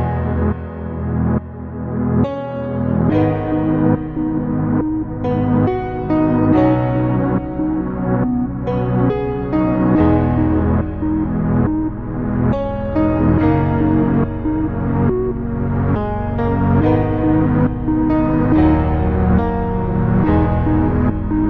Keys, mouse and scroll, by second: 2.1-4.7 drag, 7.0-10.6 drag, 11.6-13.8 middle drag, 13.8 scroll up 2, 14.4-16.0 middle drag, 17.0 Tab, 17.7 click, 20.9-21.4 middle drag.